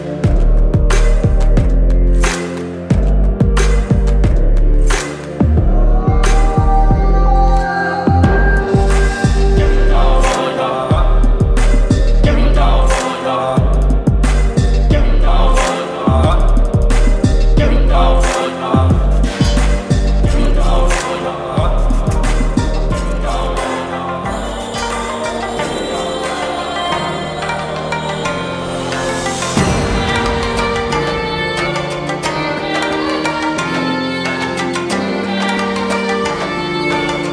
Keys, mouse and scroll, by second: 6.6 ctrl+c, 7.7 click, 10.6 ctrl+v, 11.4 Return, 13.1 v, 13.8-14.8 drag, 15.3-18.4 alt+drag, 18.9-20.8 alt+drag, 20.8-22.7 alt+shift+drag, 25.3-27.5 alt+shift+drag, 30.8 click, 36.2 click.